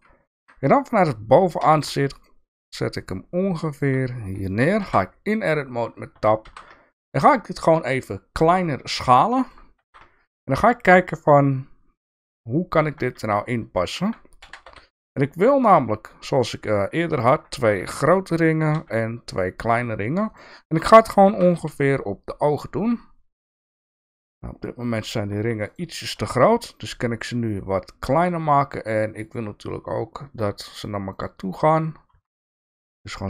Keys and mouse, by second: 5.3 Tab, 5.3 g, 6.1 1, 6.5 s, 9.3 shift+middle click, 9.8 s, 15.4 g, 17.8 g, 21.2 shift+d, 29.3-31.2 drag, 32.1 s.